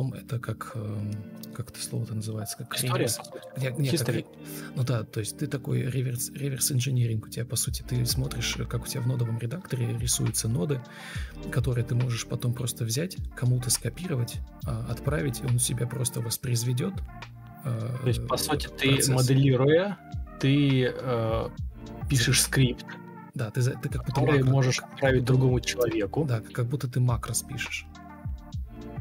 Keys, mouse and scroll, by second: 12.7 Delete, 12.9 Delete, 21.0 Escape, 21.3 Escape, 21.5 typing, 24.2 Escape, 24.3 typing, 27.0 ctrl+m, 28.9 Delete.